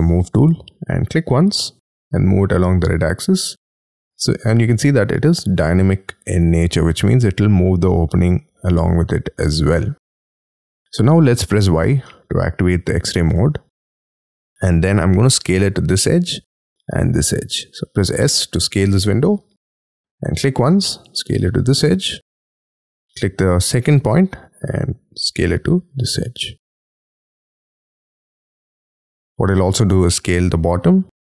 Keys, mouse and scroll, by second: 3.4 middle click, 11.6 y, 12.0 middle click, 13.0 scroll up 6, 14.4 s.